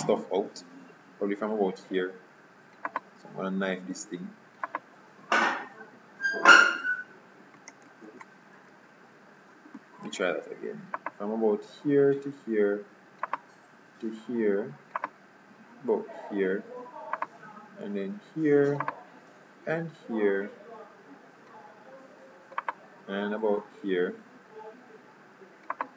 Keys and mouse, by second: 10.2 k.